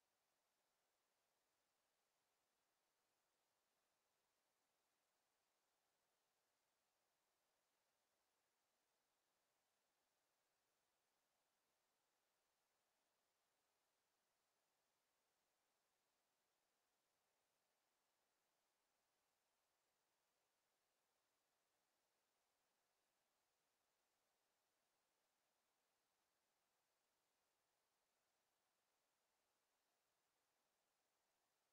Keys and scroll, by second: 8.4 Delete.